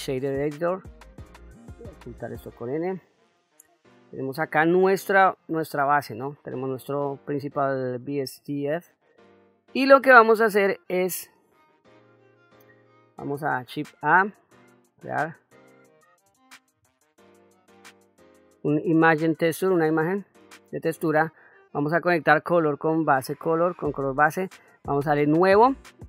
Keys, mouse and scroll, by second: 2.0 n, 3.2 ctrl+middle click, 4.7 shift+middle click, 5.7 middle click, 7.2 click, 11.1-12.5 middle drag, 13.9 shift+a, 22.3-23.4 drag, 25.2-26.0 drag.